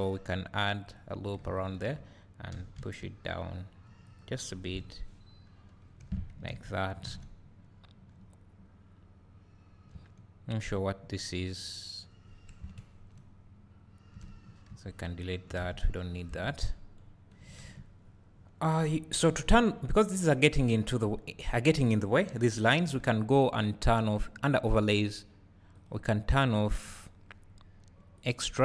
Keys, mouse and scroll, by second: 1.0 click, 1.7 alt+click, 2.5 g, 4.2 click, 4.8 KP_0, 6.0 Tab, 6.5 alt+a, 10.8 click, 12.6 KP_Decimal, 16.3 KP_0, 17.1 scroll up 2, 18.1 scroll down 1, 18.4 scroll up 1, 28.2-28.6 drag.